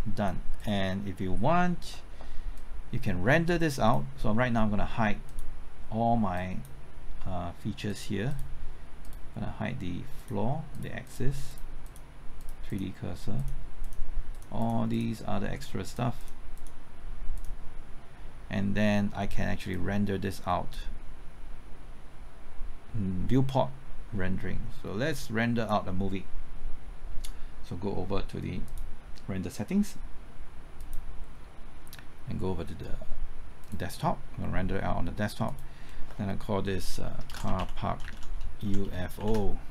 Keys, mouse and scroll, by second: 36.4 click, 37.0-39.6 typing.